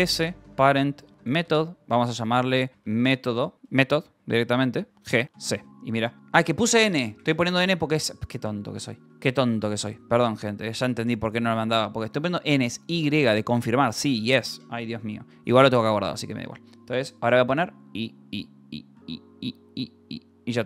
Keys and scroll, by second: 0.0-5.8 typing, 9.0 Escape, 12.4 shift+;, 15.3 Up, 15.6 Return, 17.7 u, 18.9 y, 20.5-20.6 typing.